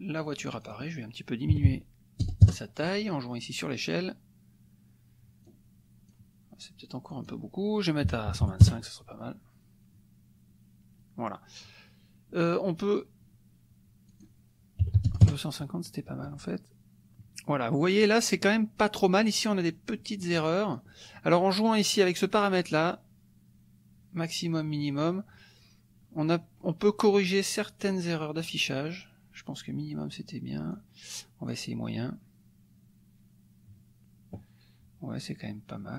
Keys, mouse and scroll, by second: 0.4-1.5 drag, 1.5 KP_2, 2.2 KP_0, 2.4 KP_Enter, 5.5 click, 7.1 click, 8.0 KP_1, 8.3 KP_2, 8.4 KP_5, 8.6 KP_Enter, 14.1 click, 14.8 KP_2, 15.1 KP_0, 15.3 KP_Enter, 20.8 click, 22.0 click, 27.8 click, 30.7 click.